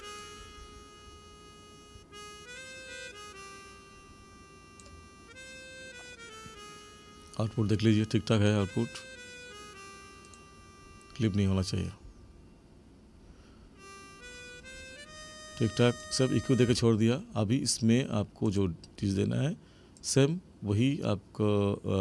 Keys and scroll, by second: 16.6 space.